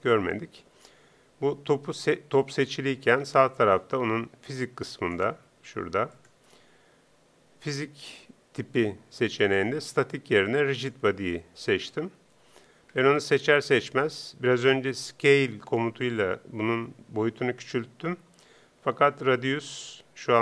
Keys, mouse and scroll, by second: 4.5-7.9 drag, 9.4-11.2 drag, 12.9-20.4 middle drag.